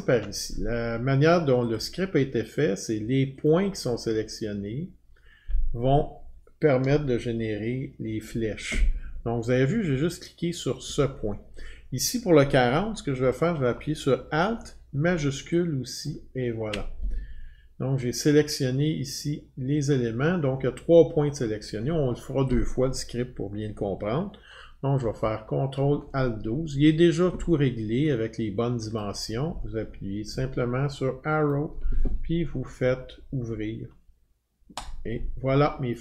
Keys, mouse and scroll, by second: 1.2 alt+scroll, 1.7 click, 3.5 click, 13.1 click, 16.0 click, 24.2 click, 25.0 ctrl+F12, 27.5 click, 27.8 click, 29.0 click, 31.5 click, 34.8-36.0 click.